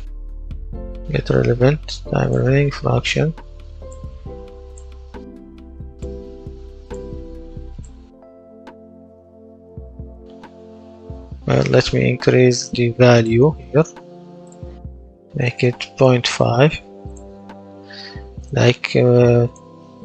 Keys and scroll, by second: 0.0-1.6 typing, 7.6 w, 8.1 space, 9.7 space, 11.6 Escape, 15.2 KP_0, 15.4 KP_Decimal, 15.6 KP_5, 15.8 Return.